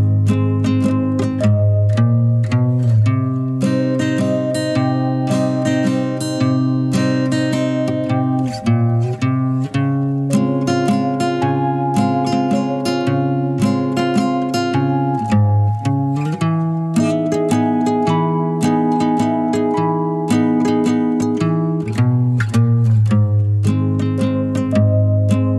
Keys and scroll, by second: 8.2-9.6 typing, 11.7-12.7 typing, 14.7-15.1 typing.